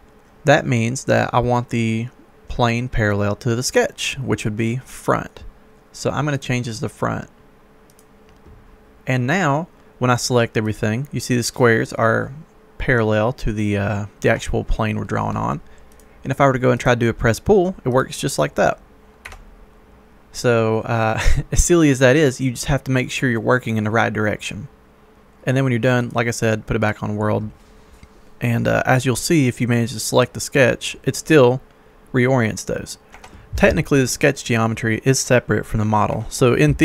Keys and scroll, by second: 14.1 Escape, 19.3 Escape, 33.0 Escape, 36.1 Escape.